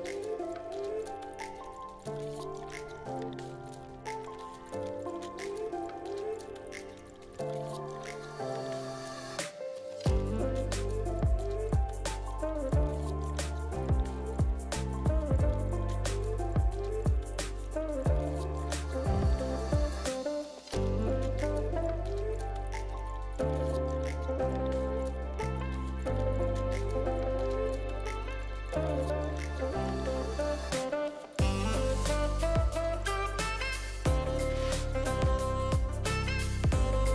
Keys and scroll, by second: 10.5 alt+v, 13.6 r, 16.1 7, 16.2 2, 17.5 ctrl+d, 17.6 ctrl+d, 17.8 ctrl+d, 18.3 v, 28.0 a, 30.2 alt+v, 33.2 v.